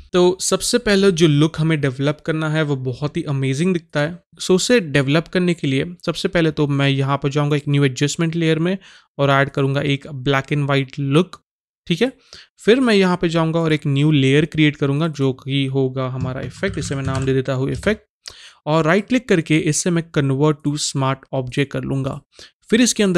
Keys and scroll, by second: 16.2-17.7 typing.